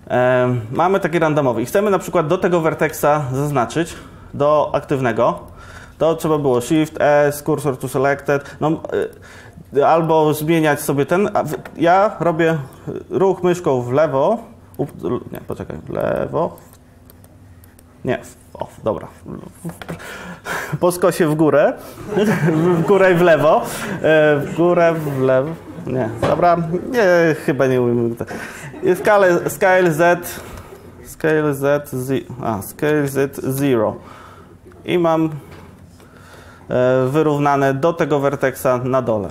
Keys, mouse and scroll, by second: 0.9 Tab, 6.7 shift+s, 29.0 s, 30.7 Escape, 31.2 s, 34.8 s.